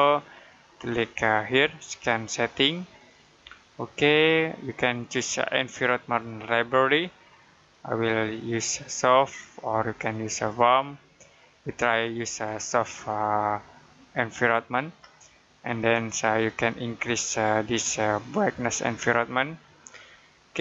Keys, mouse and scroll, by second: 15.5 click.